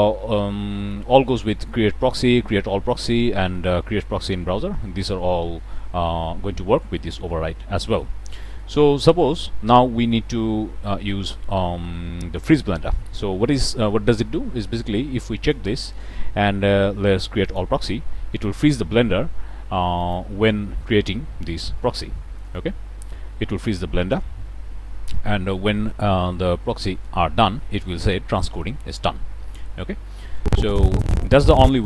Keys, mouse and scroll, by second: 8.3-8.7 middle drag, 13.8-14.3 middle drag, 15.4 click, 17.4 click, 19.9 click, 22.4 click.